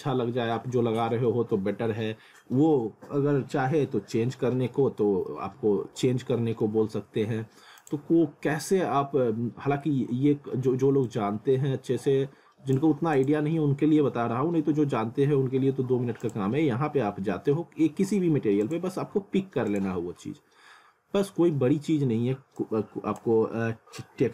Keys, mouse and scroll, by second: 4.7 alt+middle click, 5.5 scroll up 1, 6.1 alt+middle click, 7.8 click, 11.1 click, 16.2 click, 18.7 click, 22.6 click.